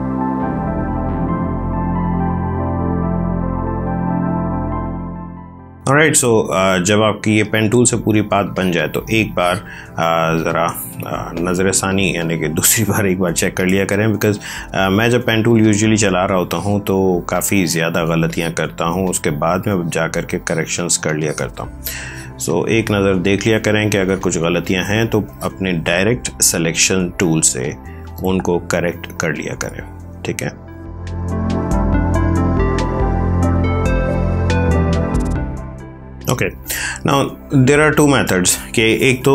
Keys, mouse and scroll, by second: 0.0 click, 0.3 ctrl+z, 0.5 click, 0.9 ctrl+z, 1.0 click, 1.4 space, 1.5 click, 1.7 space, 1.8 click, 2.0 space, 2.2 click, 2.4 space, 2.5 click, 3.0 ctrl+z, 3.3 alt+click, 3.6 space, 3.7 click, 4.0 a, 4.1 click, 4.6 space, 4.7 click, 5.3 space, 5.5 ctrl+click, 5.7 click, 14.2 click, 16.2-19.3 typing, 16.4 click, 17.3 click, 18.2 click, 19.0 click, 20.3 click, 20.4 space, 21.0 click, 21.2 space, 21.9 click, 22.0 space, 22.8 click, 22.9 space, 23.9 ctrl+click, 25.2 click, 30.9 space, 31.1 click, 32.1 space, 32.3 click, 32.5 space, 32.6 ctrl+click, 33.8 space, 34.1 click, 34.3 space, 34.6 click, 34.9 ctrl+space, 35.1 ctrl+click.